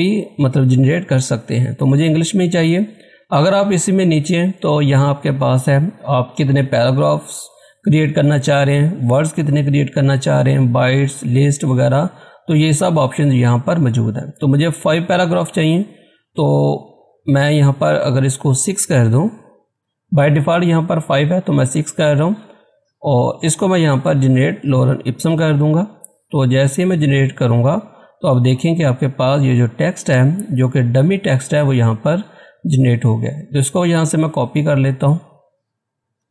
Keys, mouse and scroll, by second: 2.2 scroll down 2, 3.1 scroll, 3.3 scroll up 1, 3.7 scroll down 1, 18.2 click, 18.2 typing, 19.7 6, 21.9 typing, 24.8 click, 24.8 typing, 27.3 typing, 29.0 scroll down 1, 29.8 scroll up 1, 30.7 scroll down 1, 32.1 scroll up 1, 33.5-36.0 drag.